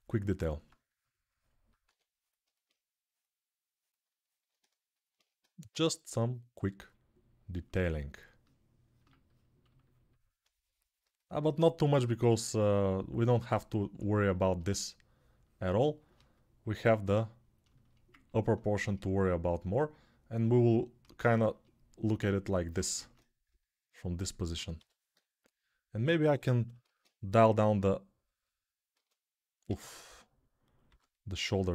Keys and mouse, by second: 1.6 1, 11.5-15.9 shift+right drag, 15.9-31.7 alt+shift+drag, 22.9 ctrl+Tab, 24.5 g, 24.9 ], 25.4 ], 27.2 alt+q, 28.7 a, 29.4 a, 30.6 g.